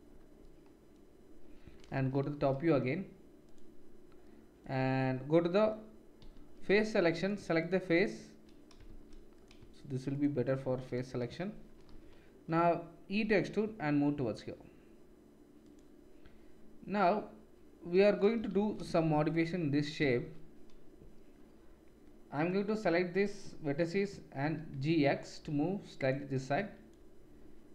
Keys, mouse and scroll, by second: 1.9 KP_7, 3.4 click, 6.2-7.6 middle drag, 6.2 3, 7.6-9.4 shift+drag, 8.8 shift+z, 9.4 shift+middle click, 10.1 shift+click, 10.4 shift+click, 10.7 shift+z, 11.9 KP_7, 13.2 e, 18.3-20.0 shift+middle drag, 18.6 shift+z, 19.1 1, 20.1 shift+z, 22.4-26.1 drag, 24.4 g, 26.5-27.7 drag.